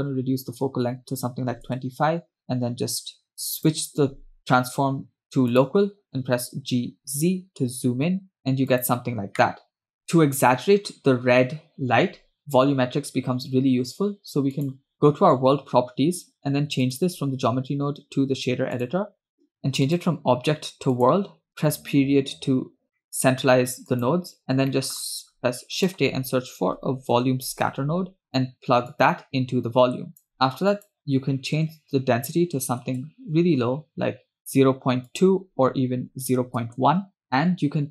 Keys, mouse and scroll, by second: 3.7-6.2 drag, 7.1 g, 9.9 click, 10.0-10.8 scroll up 2, 14.6 click, 17.0-19.1 drag, 20.0-21.3 drag, 21.5 scroll down 1, 21.6 KP_Decimal, 22.8-23.8 scroll down 4, 23.2 middle click, 23.9 click, 24.9 shift+middle click, 25.2 shift+a, 29.2-30.3 drag, 30.8-33.1 drag, 35.2-36.9 drag.